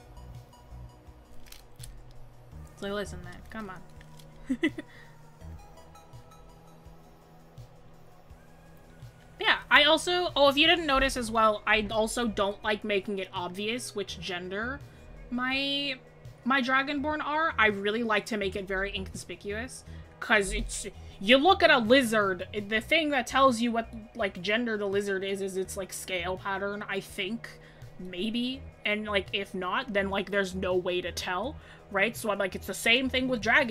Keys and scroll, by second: 18.9 scroll.